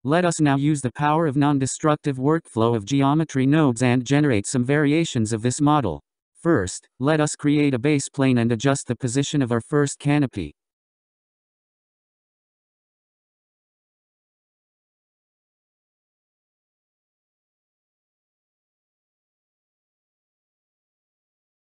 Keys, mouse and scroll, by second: 4.1 click, 5.5-6.0 scroll up 2, 6.0-6.9 scroll down 3, 6.9-8.8 middle drag, 8.8 shift+a, 13.8 s, 18.7-21.7 middle drag.